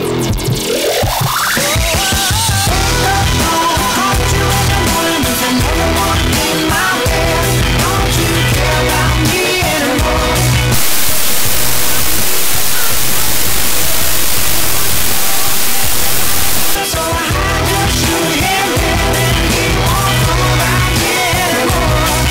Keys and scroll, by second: 17.0 Page_Down.